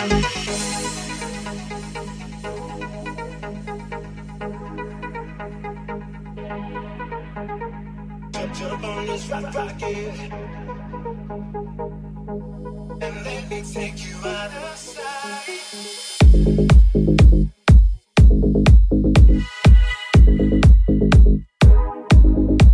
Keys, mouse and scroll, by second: 1.7 right click, 1.8-3.0 middle drag, 3.0 shift+click, 3.1 shift+middle click, 3.8 shift+click, 3.9 shift+middle click, 4.3 shift+click, 4.5-6.6 shift+middle drag, 6.6 right click, 6.6 x, 6.7 middle click, 7.1 right click, 7.2 middle click, 7.7 right click, 7.7 3, 7.8-12.1 middle drag, 10.4 alt+z, 11.9 2, 12.1 right click, 12.1 middle click, 12.6 shift+right click, 12.7 shift+middle click, 13.0 shift+right click, 13.0 shift+middle click, 13.9-21.1 alt+middle drag, 14.1 x, 14.3 alt+z, 14.8 right click, 15.6 alt+right click, 15.9 x, 16.8 x, 18.1 alt+z, 19.2 alt+z, 19.3 alt+z, 20.5 alt+z, 20.7 1, 21.1 click, 21.1-22.7 middle drag, 22.4 /.